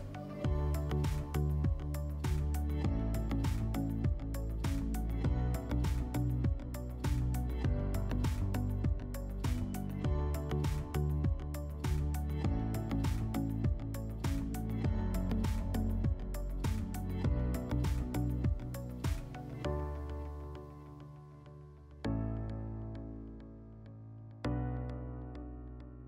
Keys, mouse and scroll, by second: 8.5 click, 9.4 middle click, 10.1 click, 11.0 click, 12.0 scroll, 13.0 click, 14.9 click, 15.0 click, 15.7-16.5 typing, 18.8-20.4 drag, 20.7-21.2 drag, 22.1 click.